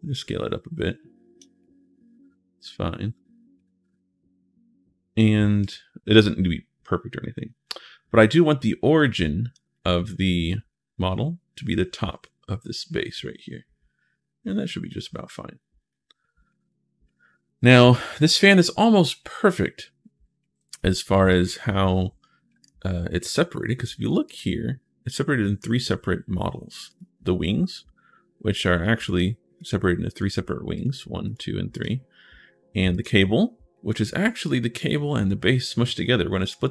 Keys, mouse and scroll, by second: 1.5-3.3 right drag, 3.6-4.1 scroll up 1, 5.4 click, 7.5-9.3 drag, 9.7 middle click, 10.4 scroll up 1, 13.0-14.9 middle drag, 15.1-16.2 scroll up 3, 16.2 scroll up 1, 19.4 shift+right click, 21.0 right click, 22.4 click, 24.0 click, 26.7 click, 28.9 click, 29.4 click, 29.9 click, 30.5 click, 31.1 click, 31.6 right click, 32.7 right click, 33.6-34.1 scroll up 1, 36.6 right click.